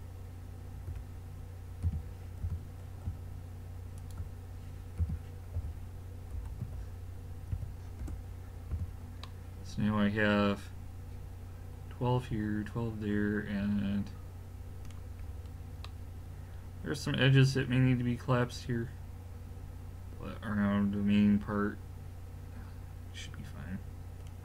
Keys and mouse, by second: 0.9 l, 1.9 g, 5.0 g, 8.7 a, 11.0 middle click, 15.3-17.8 middle drag.